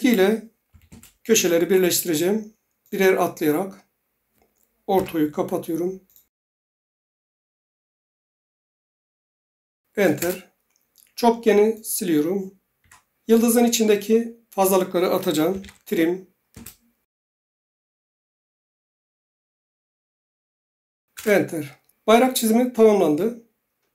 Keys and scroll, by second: 0.7 typing, 0.9 Return, 4.9 F8, 9.9-10.7 typing, 12.8 Delete, 15.2-16.1 typing, 16.5 Return, 21.1 Return.